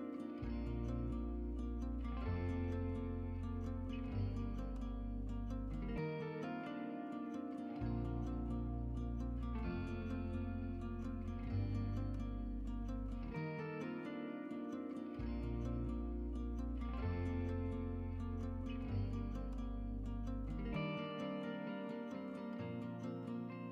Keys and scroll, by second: 6.2-8.9 typing, 18.5-21.0 typing.